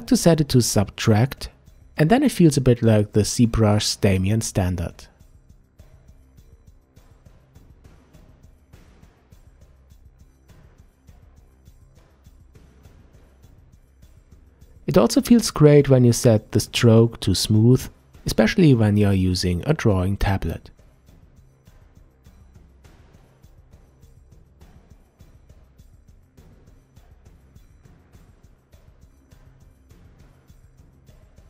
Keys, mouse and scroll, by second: 1.8-4.8 drag, 5.2-7.8 drag, 7.8-8.6 middle drag, 8.6-9.7 drag, 9.7-10.7 middle drag, 10.7-12.0 shift+drag, 12.0-13.5 middle drag, 14.1-17.1 drag, 18.7-21.7 drag, 23.1-24.6 middle drag, 24.6-27.7 drag, 28.0-30.8 middle drag, 30.8-31.4 drag.